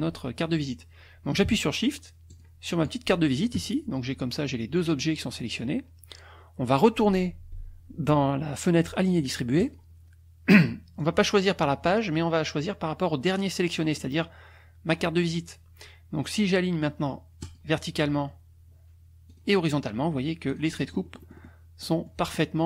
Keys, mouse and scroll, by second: 2.3 shift+click, 9.6 click, 11.0-14.0 drag, 17.4 click, 19.3 click, 20.5 click, 20.8 middle click, 21.8 middle click.